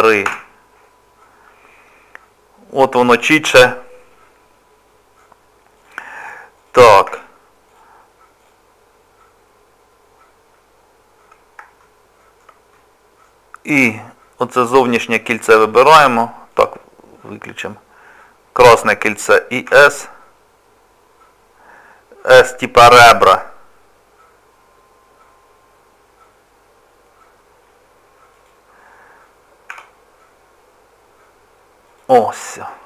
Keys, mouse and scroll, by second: 2.9 scroll up 3, 3.7 middle click, 5.8 click, 6.5 click, 7.2 Tab, 7.7 click, 8.4 click, 11.0-11.4 scroll down 1, 11.8 shift+middle click, 12.7 middle click, 14.8 click, 16.5 click, 19.7 s, 29.7 s, 32.7 middle click.